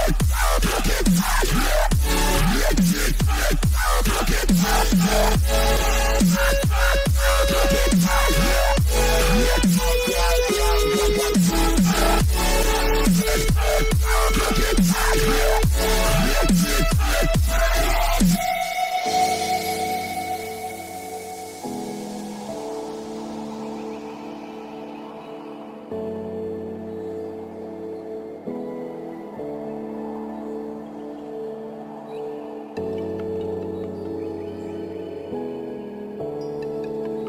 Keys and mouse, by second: 1.8 a, 2.2 a, 3.1 a, 4.1 c, 7.3 g, 11.1 a, 11.3 a, 12.5 c, 16.9 KP_7, 18.5 g, 29.7 z, 32.3-33.4 middle drag, 34.2-37.2 middle drag.